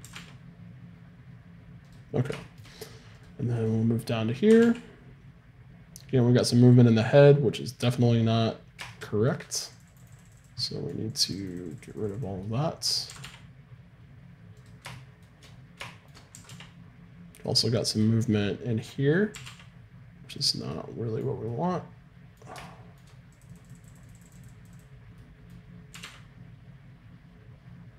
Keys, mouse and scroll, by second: 0.0 r, 3.2-4.7 right drag, 4.5 r, 8.9 middle click, 9.8-14.5 drag, 13.1 r, 16.4 r, 19.3 r, 22.9 middle click, 23.5-26.5 drag, 26.0 r, 26.5 middle click.